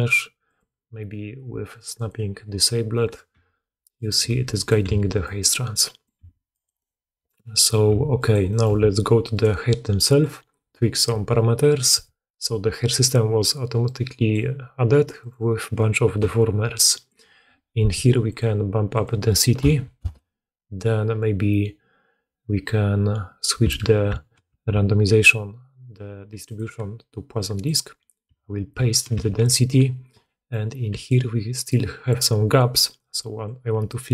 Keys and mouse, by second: 3.0 click, 3.0 middle click, 3.2 g, 3.8 click, 4.1 r, 4.7 g, 6.1 g, 7.8 g, 8.6 Tab, 9.2 middle click, 10.1-24.3 drag, 24.3 ctrl+c, 29.0 ctrl+v, 30.4 click, 30.7-32.2 d, 32.3-34.1 drag, 32.3-34.1 middle drag, 32.3-34.1 right drag, 32.3 d, 32.8 d, 33.0 d.